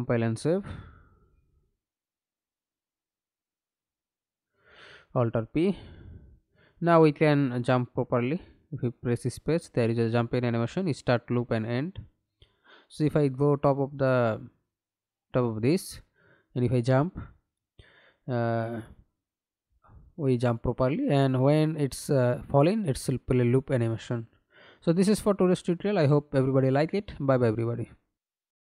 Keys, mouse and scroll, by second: 3.0 middle click, 4.1 F11, 4.8 alt+p, 6.7 w, 8.8 w, 9.4 space, 10.6-14.0 w, 14.1 space, 19.0 space, 22.6-23.9 w, 24.5 w, 28.1 alt+F9.